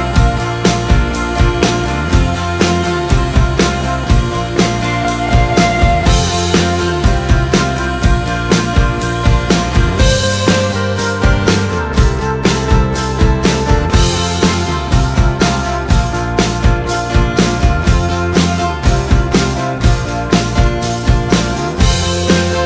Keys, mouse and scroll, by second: 8.9-19.9 drag.